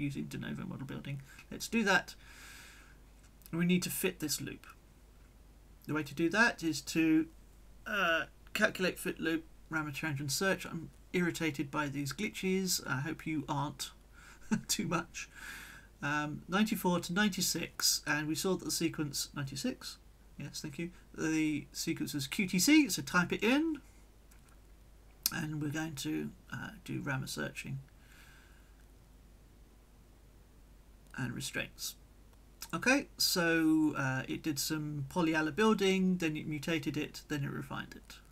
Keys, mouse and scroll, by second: 1.8 right click, 3.4 click, 4.0-6.0 middle drag, 6.9 click, 9.8 click, 11.2-12.0 drag, 12.2 click, 14.1 click, 15.0 click, 15.6 click, 16.4 9, 17.0 4, 17.5 Tab, 18.3 9, 19.3 5, 20.2 BackSpace, 20.8 6, 21.0 Tab, 21.9-23.5 typing, 27.0 click, 28.3-30.2 drag, 31.0 click, 35.7-37.4 drag, 37.0 right click, 37.6 middle click.